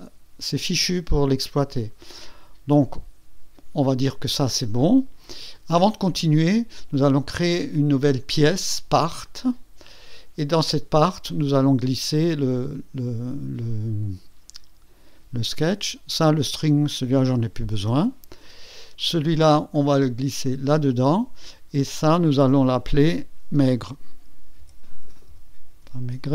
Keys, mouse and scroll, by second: 9.2 click, 16.6 click, 17.6 Delete, 19.7 click, 21.8 click, 22.2 click, 23.1 F2, 24.3-26.3 typing.